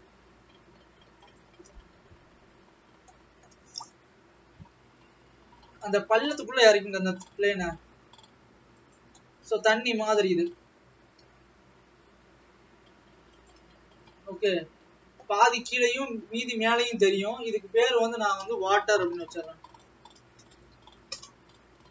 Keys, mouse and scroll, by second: 1.4 click.